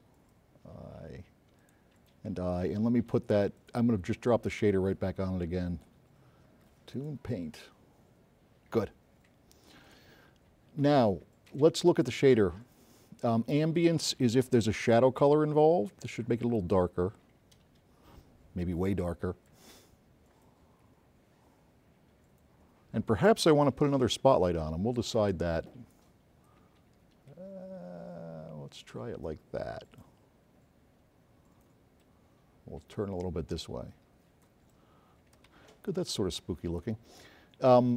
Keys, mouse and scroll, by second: 1.7 shift+click, 3.6-4.0 drag, 7.0 click, 9.9 click, 11.6-12.1 drag, 13.9 click, 16.2 click, 19.1-19.6 drag, 19.9 middle click, 21.5 middle click, 23.9 click, 23.9 s, 24.7 right click, 25.4 click, 26.4 middle click, 26.9 middle click, 27.4-30.4 right drag, 32.1-33.1 right drag, 34.8 click, 36.4-37.0 drag.